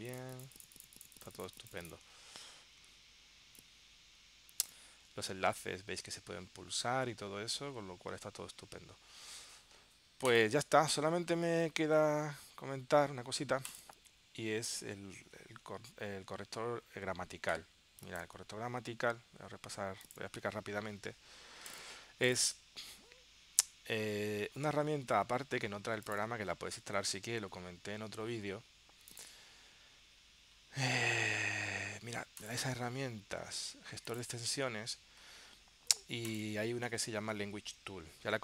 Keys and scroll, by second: 15.3 super+q, 18.6 super+w.